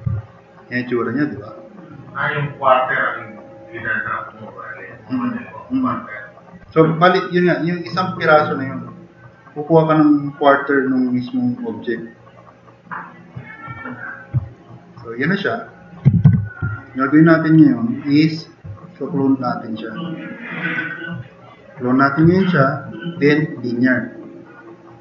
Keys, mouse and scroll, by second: 0.1-0.5 drag, 14.5 click, 15.6 click, 16.3 4, 16.7-17.2 drag, 17.4 click, 18.0 click.